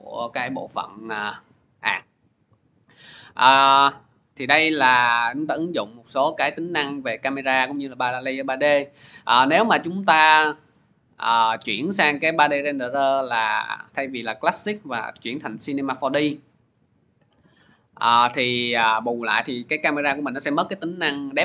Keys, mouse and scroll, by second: 4.0 click, 9.5 click, 10.4 click, 11.7 click, 12.8 click.